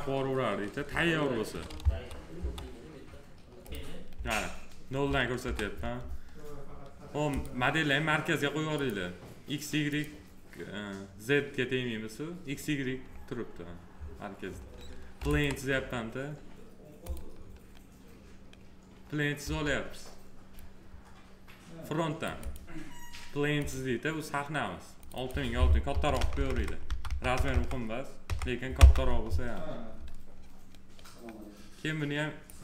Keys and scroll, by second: 5.2 f, 19.2 s, 25.7 6, 28.6 Return.